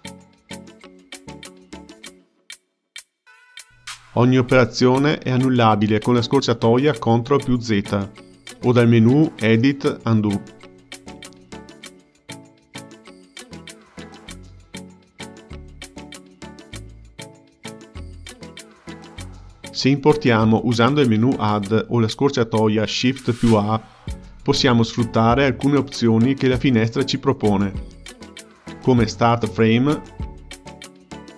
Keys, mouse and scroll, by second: 1.0-3.2 drag, 5.1 click, 5.3 ctrl+z, 6.4 ctrl+z, 11.1-14.2 drag, 14.6-19.4 drag, 23.1-26.3 drag.